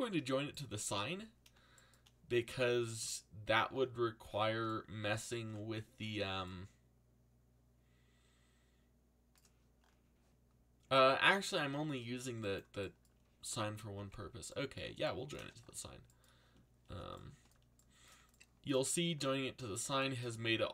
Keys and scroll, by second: 13.9 ctrl+j.